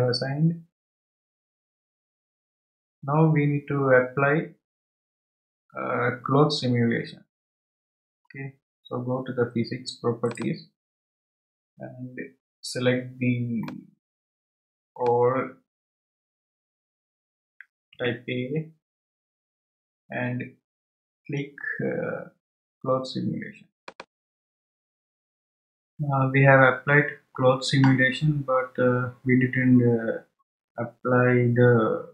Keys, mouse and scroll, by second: 10.2 click, 11.5-12.2 scroll down 7, 13.6-16.7 middle drag, 18.9 a, 23.8-24.7 drag, 29.6-30.0 scroll down 4.